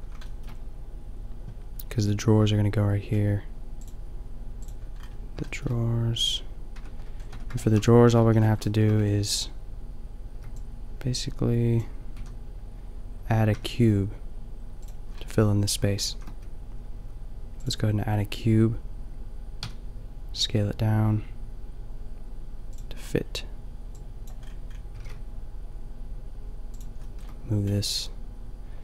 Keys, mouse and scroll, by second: 5.1 middle click, 6.7 Tab, 7.3 Tab, 8.1 a, 8.2 a, 10.3 b, 12.2 a, 13.5 Tab, 14.8-15.9 drag, 16.1 shift+a, 19.8 s, 22.8 click, 23.0 middle click, 23.2-23.8 drag, 24.9 g, 27.1-27.6 middle drag.